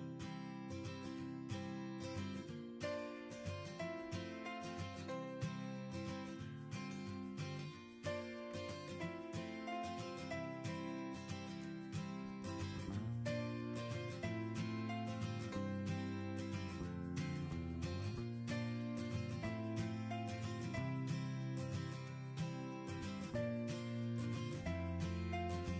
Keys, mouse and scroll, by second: 1.9 click, 4.2 click, 5.2-6.1 middle drag, 6.1 scroll, 7.1 middle click, 8.5 middle click, 8.5-9.5 drag, 10.9-11.9 drag, 12.0-12.6 right drag, 12.6 click, 16.1 scroll down 1, 16.1 scroll, 16.7 right click, 18.1 click, 19.4 click, 20.4 drag, 20.9-22.1 right drag, 22.1-23.3 drag, 23.5-24.6 drag.